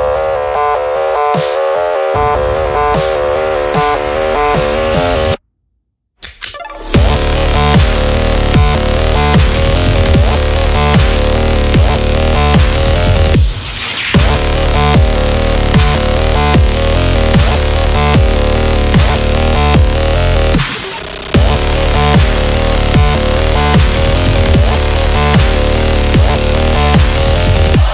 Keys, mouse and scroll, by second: 1.9 ctrl+j, 2.5 click, 3.8 Right, 4.8 Up, 5.5 Down, 6.7 scroll down 1, 7.2 space, 7.3 click, 7.4 space, 7.6 scroll down 1, 8.0 space, 8.2 click, 8.3 space, 8.9 click, 9.9 space, 10.0 click, 10.1 space, 11.2 click, 14.9-16.5 typing, 17.6 shift+l, 19.1-22.8 typing, 23.4 click.